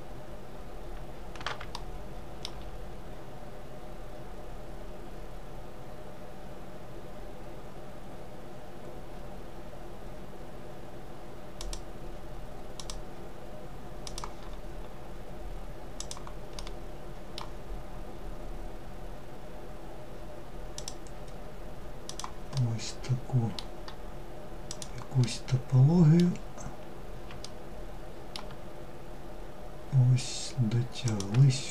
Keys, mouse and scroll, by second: 0.0-1.3 scroll up 2, 1.3-4.5 shift+middle drag, 16.1-19.3 middle drag, 22.1-30.2 middle drag.